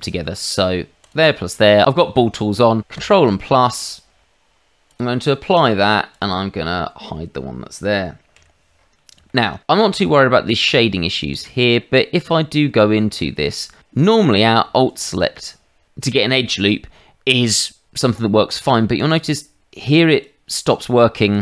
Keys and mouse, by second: 1.0 shift+click, 2.9 ctrl+KP_Add, 4.9 click, 5.5 click, 6.1 click, 8.3 h, 9.2 shift+middle click, 10.6 Tab, 11.3 click, 11.9 Tab, 14.8 alt+click, 18.9 alt+click, 20.1 alt+click, 21.2 alt+click.